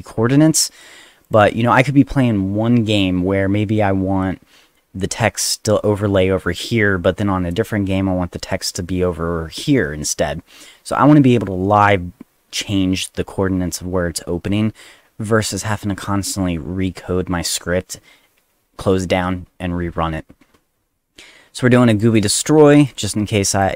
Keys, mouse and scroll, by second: 1.2 click, 21.9 click, 22.1 click, 22.9 click.